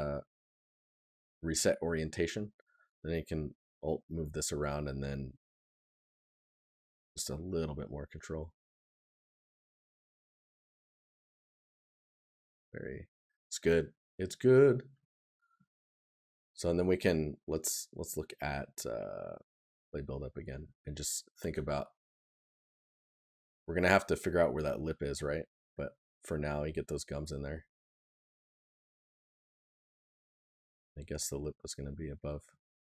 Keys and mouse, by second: 7.5 right click, 11.6 right click, 14.6 right click, 19.9 right click, 21.5 right click, 27.4 right click.